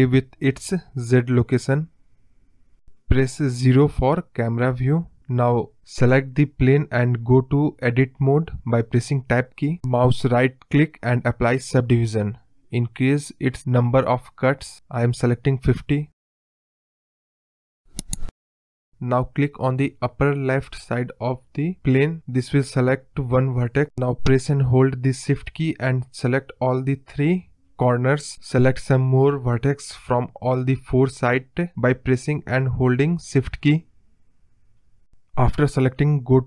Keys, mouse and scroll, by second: 0.9 scroll down 1, 1.1 scroll up 2, 1.1 middle drag, 1.4-1.8 scroll down 6, 1.8-3.3 middle drag, 3.4 KP_0, 4.6 scroll down 1, 6.3 scroll up 1, 6.5 middle drag, 6.8-7.2 scroll down 6, 7.2 click, 7.5 scroll up 3, 7.7-8.4 middle drag, 8.4 Tab, 8.7 scroll down 1, 8.8 scroll up 1, 8.8 middle click, 9.7-11.3 right drag, 11.3-12.9 drag, 13.0-14.6 drag, 15.3 scroll down 1, 15.5 middle click, 16.0-16.6 scroll up 2, 16.2 middle click, 16.6 scroll down 1, 16.8 middle click, 18.0 click, 19.1-19.9 scroll up 1, 20.5 click, 21.9 shift+click, 22.7 shift+click, 23.3 shift+click, 24.4 shift+click, 25.6 shift+click, 26.3 shift+click, 27.2 shift+click, 28.0 shift+click, 28.5 shift+click, 29.1 KP_7, 32.8 shift+click, 33.7 shift+click, 35.1 shift+click, 35.9 shift+click.